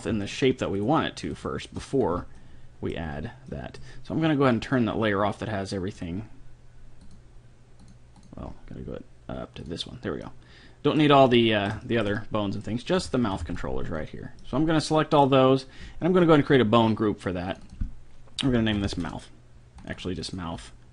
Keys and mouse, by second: 0.8-2.4 right drag, 2.1 a, 2.4 middle click, 2.6-5.3 middle drag, 2.7 click, 5.9-10.4 drag, 10.3 right click, 10.4-11.5 middle drag, 11.7-14.1 middle drag, 12.9 a, 13.3 a, 13.4 b, 14.1 click, 14.5 middle click, 15.5 middle click, 16.6-19.5 drag, 19.8-20.9 drag.